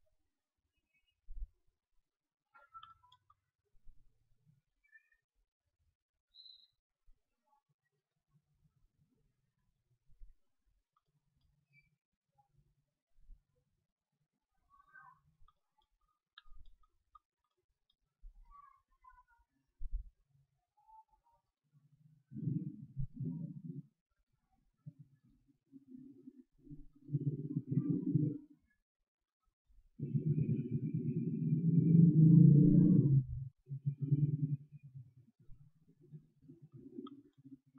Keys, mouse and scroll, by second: 0.2 q, 1.5 KP_1, 2.9-4.2 middle drag, 4.2-8.1 drag, 4.2-7.2 right drag, 7.8-9.6 right drag, 9.0 click, 10.2 z, 10.6 click, 11.2-12.9 middle drag, 11.5 z, 12.3 z, 14.1 middle click, 14.4 z, 15.2-18.4 middle drag, 18.4-20.0 drag, 18.4-20.0 right drag, 21.4 right click, 29.2 right click, 32.7-37.6 drag, 34.0-37.0 right drag, 37.0-37.7 middle drag.